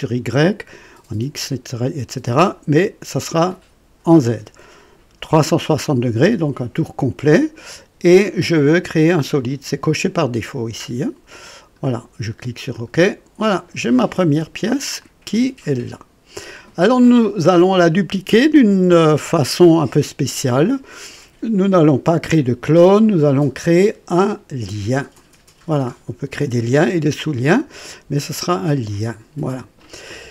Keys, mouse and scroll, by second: 0.6 click, 2.4 click, 8.3 click, 11.3 click, 12.7 click, 15.0-17.3 drag, 23.2 click, 28.9 click.